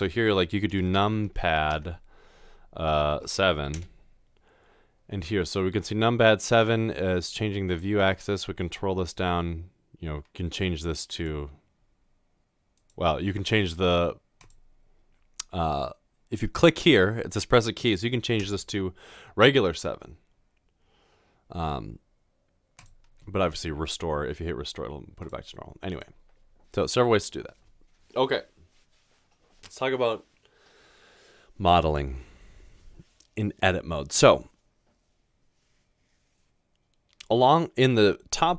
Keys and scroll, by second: 0.8-1.7 typing, 3.7 typing, 18.5 7.